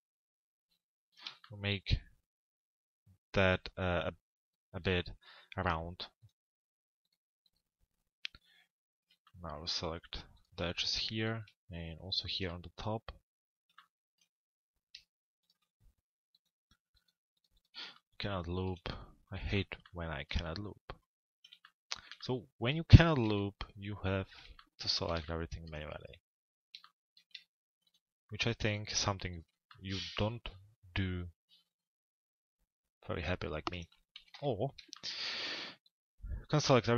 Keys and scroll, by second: 23.0 z, 33.8 t, 34.3 z.